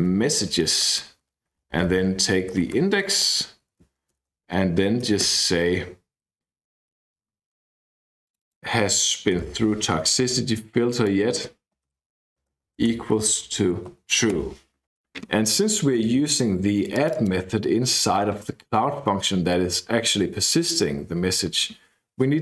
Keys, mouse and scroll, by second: 0.0-5.1 typing, 3.2 Right, 7.4-8.0 scroll up 2, 8.2 click, 9.3 ctrl+c, 10.0 scroll up 2, 10.0-10.9 scroll down 2, 10.9 click, 11.8 ctrl+v, 12.4-14.9 typing, 16.9 click, 22.3-22.4 typing.